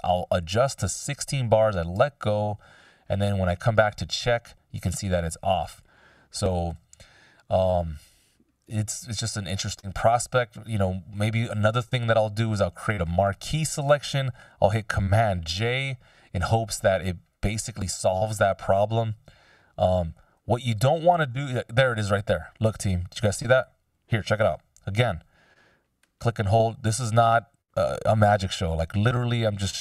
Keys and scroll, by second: 6.7 F16, 15.3 super+j.